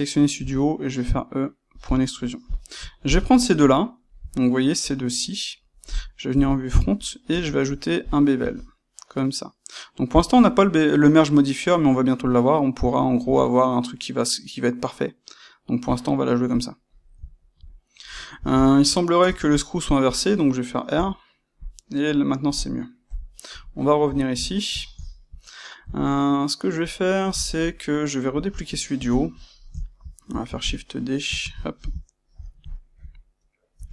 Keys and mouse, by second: 0.3 e, 1.8 click, 2.4 click, 3.0 shift+click, 3.8-23.0 shift+middle drag, 6.2 KP_1, 7.2 space, 8.1 space, 21.6 click, 23.0 KP_1, 23.7-29.0 shift+middle drag, 29.0 click, 29.5-31.8 ctrl+shift+middle drag, 31.3 shift+d, 31.8 click, 32.0-33.9 shift+middle drag, 33.7 g.